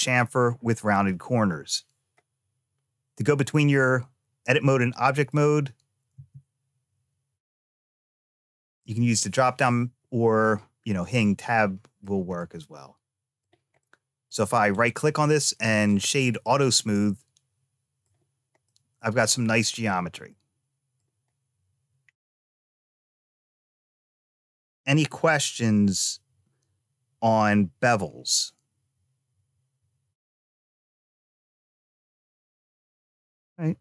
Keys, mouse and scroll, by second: 0.8 click, 3.6 Tab, 4.5 click, 6.0 space, 6.5 Tab, 7.5 Tab, 8.0 click, 11.0 middle click, 12.2-13.3 middle drag, 13.7 middle click, 14.6-15.7 right drag, 16.3-17.9 middle drag, 18.5-19.7 middle drag, 20.1 scroll up 1, 20.1 middle click, 22.6-23.2 scroll down 1.